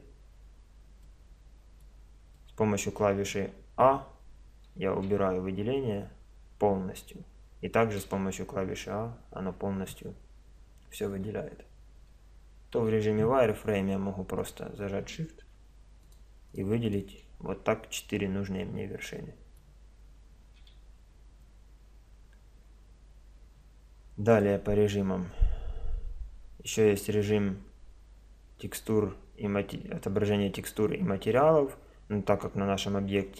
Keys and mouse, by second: 1.0-2.9 middle drag, 3.1 middle click, 5.1 a, 8.0 a, 11.2 a, 12.8 z, 14.4-16.2 drag, 18.0-20.0 middle drag, 20.6 a, 24.4 click, 25.1 click, 25.8 click.